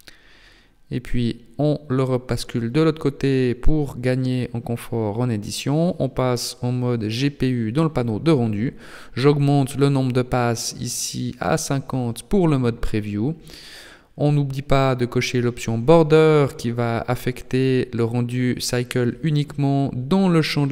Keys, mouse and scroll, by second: 1.0 click, 3.9 click, 5.0 click, 7.9 click, 8.2-9.5 scroll down 7, 9.5 click, 15.3 click, 17.3 click.